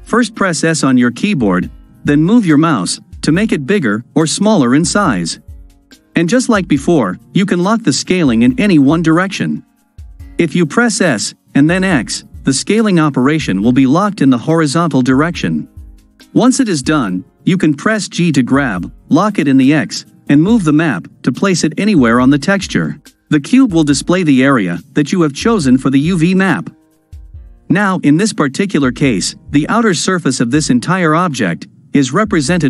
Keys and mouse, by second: 0.8 s, 10.0 s, 18.2 g.